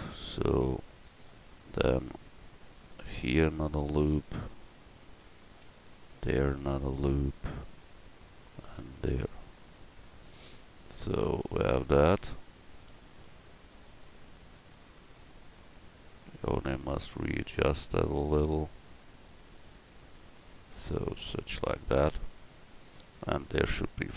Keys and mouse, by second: 0.8 ctrl+r, 5.5 ctrl+r, 8.5 ctrl+r.